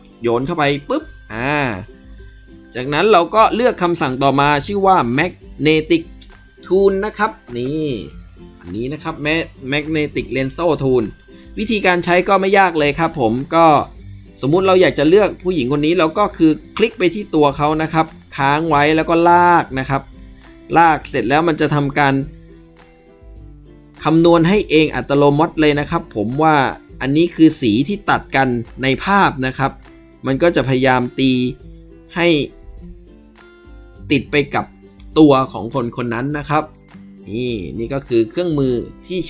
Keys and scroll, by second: 10.2 ctrl+b.